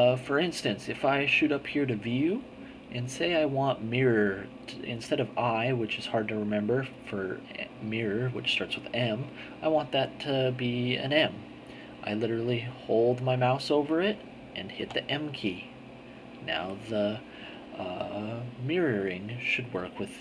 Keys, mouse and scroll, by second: 14.7 m, 18.3-19.4 drag.